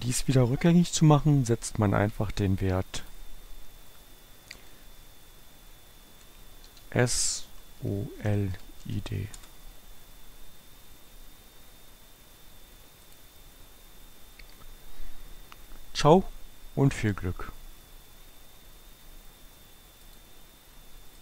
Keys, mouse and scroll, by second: 3.1 click, 3.7 Up, 4.6 BackSpace, 7.5-9.2 typing, 9.5 Return, 13.2 click, 20.2 click.